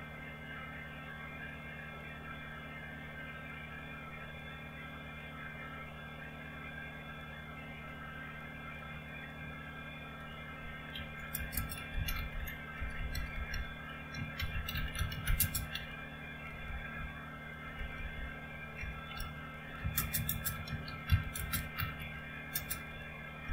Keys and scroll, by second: 11.1-23.5 typing.